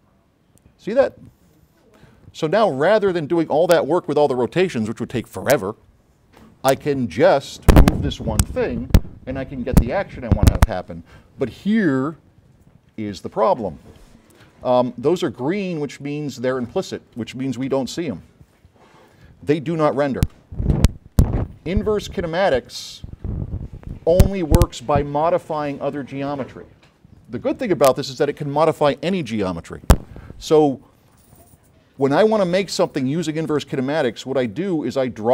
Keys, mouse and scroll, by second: 12.3-13.4 drag, 14.6 s, 14.7-15.7 right drag, 15.8 middle click, 16.2 scroll up 2, 16.7 s, 16.7 click, 17.8 q, 18.2 click, 20.1 right click, 20.1 s, 20.8 s, 21.0 right click, 22.4 click.